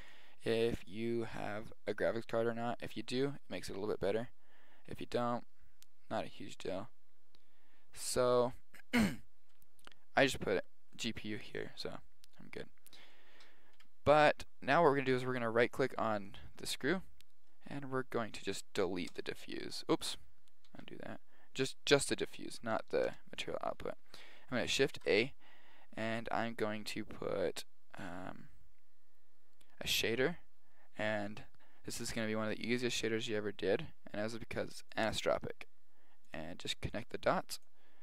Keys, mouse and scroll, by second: 0.1-2.8 drag, 4.8 middle click, 5.0 middle click, 11.0-12.5 drag, 12.5 middle drag, 13.8 KP_1, 15.2-16.3 middle drag, 16.3 right click, 17.5-18.2 drag, 19.3 Delete, 21.0 ctrl+z, 21.8-23.3 right drag, 23.3 Delete, 25.0 shift+a, 27.1 Delete, 37.0-38.0 drag.